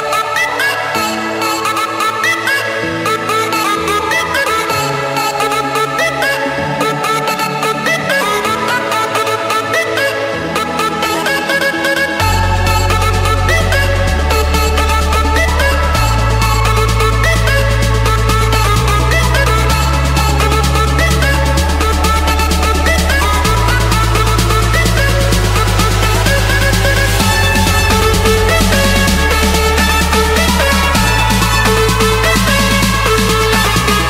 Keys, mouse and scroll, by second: 0.0 Return, 3.0 click, 4.0 click, 4.5-5.1 scroll down 7, 5.1-5.9 scroll up 8, 6.2 scroll, 6.9 click, 7.9 click, 8.3-8.9 scroll, 9.3 Escape, 10.4-11.7 typing, 12.6 Return, 15.1-16.3 drag, 17.4 click, 17.9 Return, 18.7 Return, 20.7 Return, 22.2 click, 22.9 Return, 23.7 Return, 25.8 click, 27.5 click, 27.8 scroll down 4, 28.4-28.8 scroll up 4, 30.7 click, 31.0 Escape, 32.1-33.6 typing.